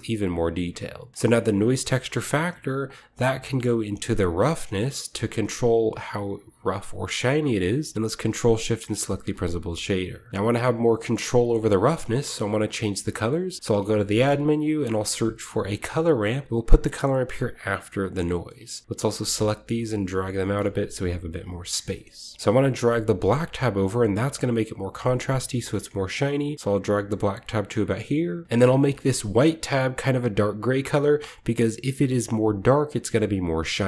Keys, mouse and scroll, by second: 0.0-0.3 typing, 0.2-0.9 scroll down 1, 0.9 click, 3.0-7.6 drag, 4.7-5.7 middle drag, 8.8-10.3 ctrl+shift+drag, 9.8-11.7 shift+middle drag, 11.9-13.5 middle drag, 12.0-13.5 scroll down 1, 12.9-14.2 typing, 13.5-14.8 drag, 15.8-18.9 drag, 19.3-20.4 drag, 19.9-20.5 typing, 20.4-29.2 drag, 21.8 middle click, 22.1-23.2 scroll up 1, 22.3 middle click, 23.2-25.3 scroll up 1, 28.2-28.9 typing, 28.4-29.2 ctrl+scroll up 1, 28.8 ctrl+middle click, 31.4 click, 32.2-33.6 drag, 33.6 middle click.